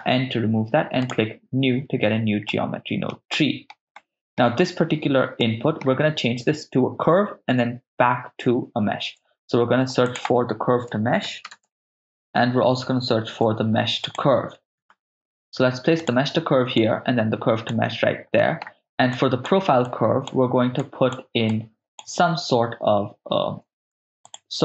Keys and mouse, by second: 1.0 click, 1.0 n, 2.5 ctrl+middle click, 3.4 middle click, 4.0 ctrl+middle click, 5.4 ctrl+middle click, 9.0 shift+a, 13.3 shift+a, 15.1 BackSpace, 16.8 click, 17.6-18.4 drag, 18.4 middle click, 19.1-20.0 drag, 20.2-20.7 drag, 20.8-21.1 drag, 21.5 click, 23.9 shift+a.